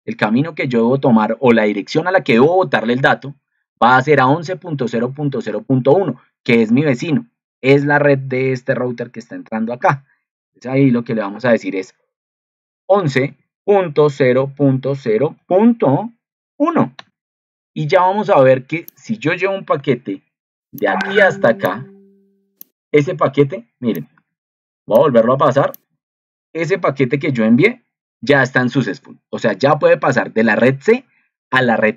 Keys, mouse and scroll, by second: 26.6 ctrl+2.